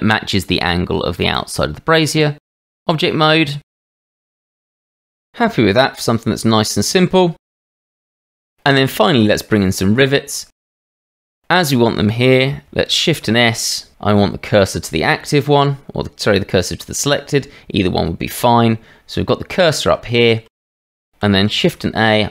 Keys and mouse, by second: 2.4 Tab, 2.7 click, 3.3 middle click, 5.4-8.0 middle drag, 8.2 click, 9.0-9.5 shift+middle drag, 11.0-12.7 drag, 12.9 shift+s, 21.5 shift+a.